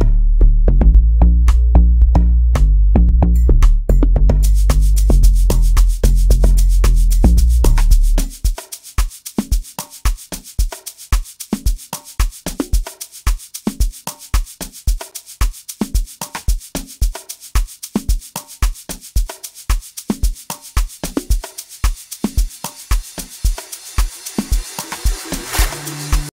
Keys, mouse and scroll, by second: 9.4-13.6 drag.